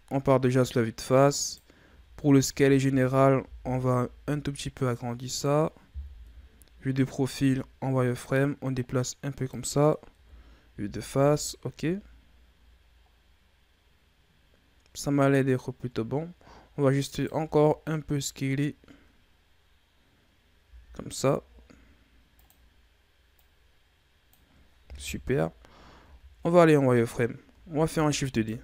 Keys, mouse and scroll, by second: 0.7-1.3 scroll up 2, 1.3 right click, 1.8 Tab, 2.4 a, 2.7 a, 3.3 s, 6.0 KP_3, 7.3 z, 8.1-10.0 drag, 10.0 KP_1, 10.6 z, 11.1 Tab, 11.5-13.0 scroll down 7, 13.0-14.6 scroll down 3, 14.6-16.1 scroll up 7, 16.1-16.4 scroll down 1, 16.4-17.1 scroll up 2, 17.1 right click, 17.3 Tab, 20.6 s, 23.2-25.0 drag, 25.0 KP_3, 25.9 z, 26.5-27.7 scroll up 3, 27.7 shift+d.